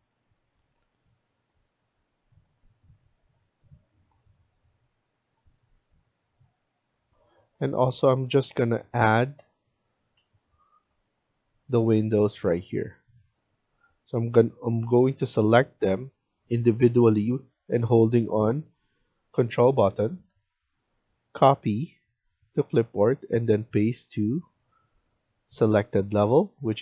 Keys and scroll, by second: 1.6 Escape, 7.0 F1.